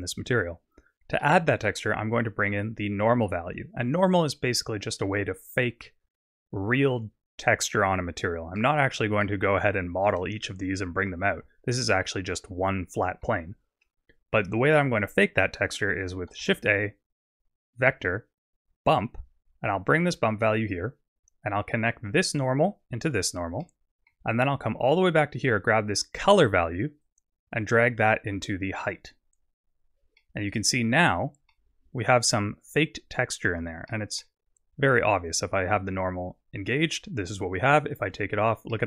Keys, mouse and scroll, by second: 1.2 middle click, 9.7 Tab, 11.9 middle click, 13.5 Tab, 16.4 shift+a, 22.1 click, 23.6 middle click, 27.0 click, 30.2 middle click, 31.1-31.6 scroll up 3, 31.6 middle click, 32.8-33.3 scroll down 1, 33.9 middle click, 36.8 click, 38.7 middle click.